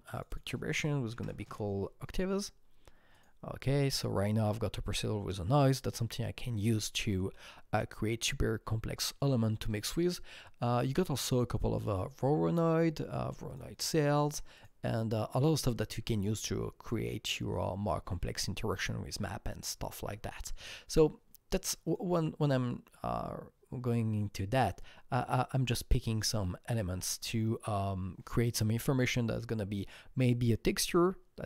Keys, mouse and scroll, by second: 0.2 double click, 1.3 KP_0, 1.5 Return, 3.1 click, 5.4 KP_Enter, 5.4 KP_0, 11.1 click, 13.5 click, 14.6 click, 15.5 click, 21.9-24.1 drag.